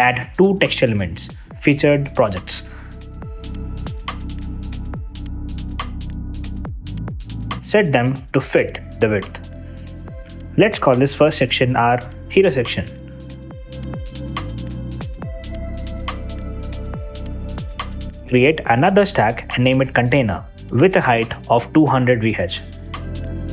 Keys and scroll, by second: 0.0-1.6 typing, 1.9 super+d, 5.4-7.1 typing, 13.0 o, 13.2 space, 13.9 BackSpace, 14.7 Return, 15.4 super+d, 19.3 Return, 20.5 Return, 21.4 Return, 21.8 BackSpace, 22.5 f.